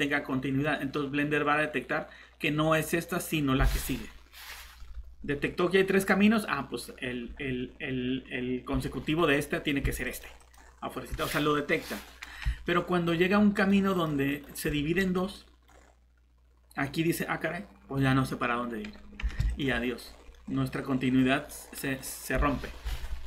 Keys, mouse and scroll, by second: 10.0 click, 10.3-10.6 typing, 11.7 middle click, 12.0 typing, 13.5 click, 15.3 middle click, 15.7 scroll up 1, 17.9-19.4 scroll down 1, 19.5 click, 19.9 scroll down 1, 20.3 middle click, 21.2 scroll up 1, 21.4 middle click, 23.2 scroll up 1.